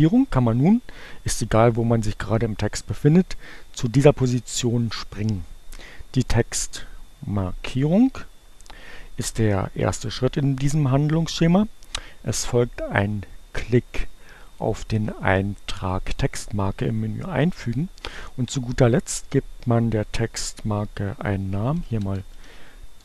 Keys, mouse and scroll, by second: 7.6 click, 14.5 click, 16.2 click, 20.8-23.0 typing.